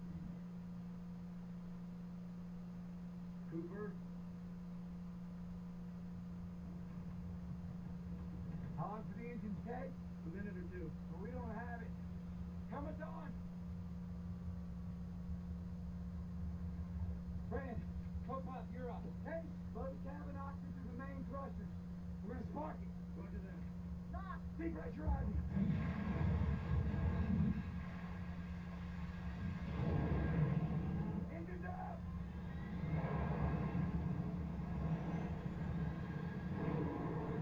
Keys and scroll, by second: 20.6 shift+Right, 21.6 shift+Right, 23.7 Right, 24.4 Right, 31.6 Right, 32.5 Right, 34.9 Down.